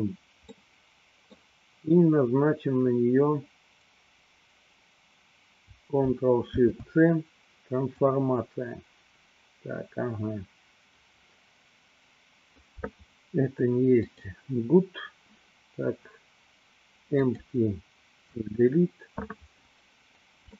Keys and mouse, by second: 0.6-1.6 middle drag, 6.4 ctrl+shift+c, 14.1 click, 17.3 click, 18.6 Delete.